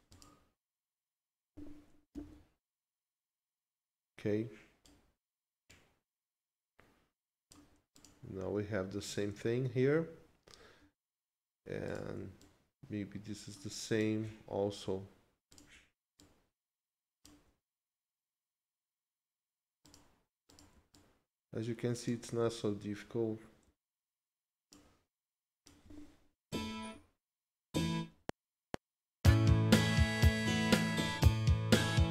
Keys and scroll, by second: 2.1 ctrl+Left, 28.1 F7.